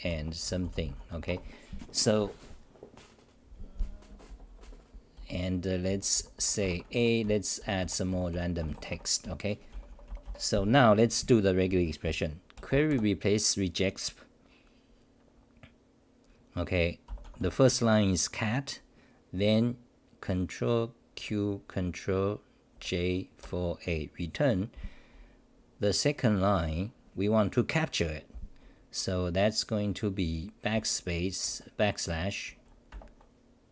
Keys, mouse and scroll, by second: 1.3 Home, 4.1-10.2 typing, 8.9 Home, 21.1 ctrl+q.